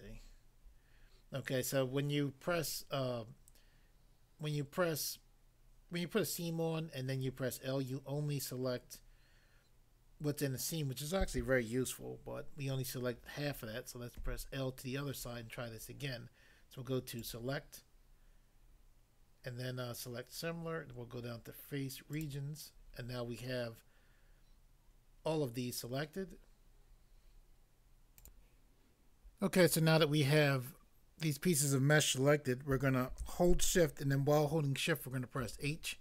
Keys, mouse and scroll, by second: 0.1 scroll up 1, 14.1 l, 17.1 click, 17.3 click, 22.1 click, 22.3 click, 28.2 click, 28.6 click, 35.4 h.